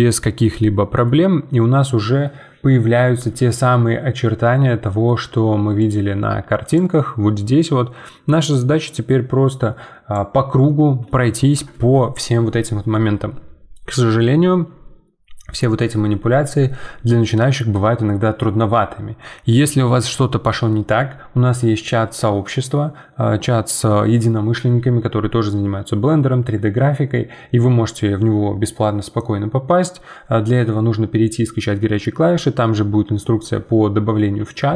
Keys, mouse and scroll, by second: 1.4-4.5 scroll down 1, 4.9-6.3 middle drag, 6.4-8.0 middle drag, 10.6-14.5 middle drag.